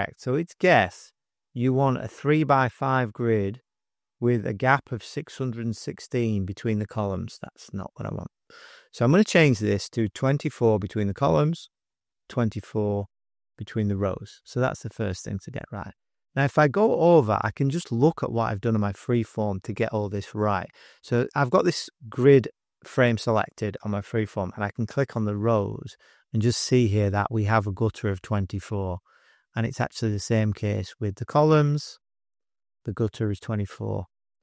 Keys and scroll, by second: 10.1-12.4 typing, 13.2 Tab, 15.6 super+-, 16.3 space, 16.8 space, 16.9 space.